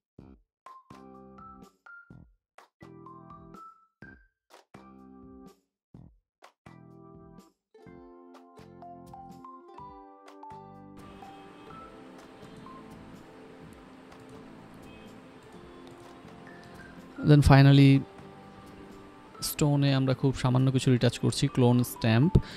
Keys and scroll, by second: 0.1-0.9 typing, 1.5 ctrl+s, 1.6 ctrl+j, 1.7 ctrl+t, 4.1 Up, 6.0 ctrl+s, 11.6-13.6 typing, 16.7-20.2 typing.